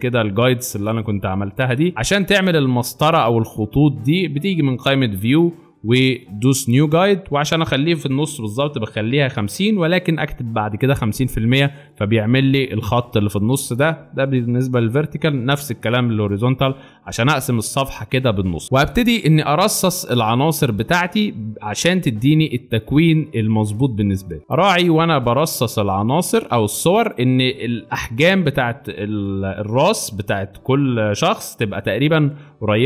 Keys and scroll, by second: 0.8 space, 1.6 alt+space, 2.3 space, 16.6 space, 17.3 alt+super+space, 18.1 alt+super+space, 24.5 ctrl+t.